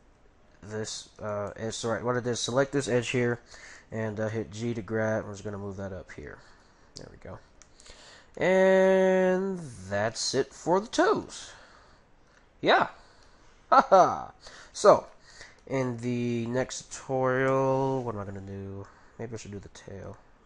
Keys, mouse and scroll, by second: 0.0 g, 1.5-3.1 middle drag, 4.4 g, 7.5-10.8 middle drag, 10.9-11.2 scroll down 1, 11.2-13.0 middle drag, 12.8 a, 13.2-14.9 middle drag, 15.3-18.6 middle drag, 19.4-20.4 middle drag.